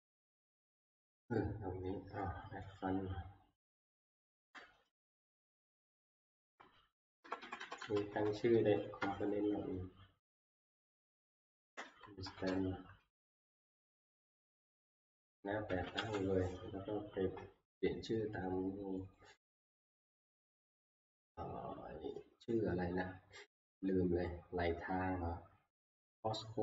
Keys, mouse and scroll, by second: 3.8 click, 5.0 Right, 6.1 Left, 7.0 Left, 7.2 Left, 7.4 Left, 7.6 Left, 7.8 Left, 8.2 Left, 8.5 Right, 10.4 Delete, 11.4 Home, 12.1 Right, 12.2 Right, 12.5 Right, 12.5 Left, 15.4-16.5 typing, 19.2 middle click, 20.4-21.2 scroll, 21.0 typing, 21.6 scroll, 25.8-26.6 scroll.